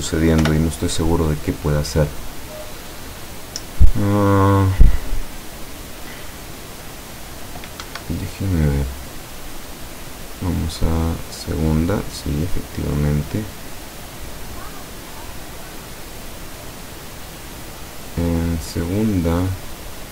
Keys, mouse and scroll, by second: 0.5 p, 8.0 Escape, 10.2 click, 11.0 click, 11.9 click, 16.6 click, 17.5 click.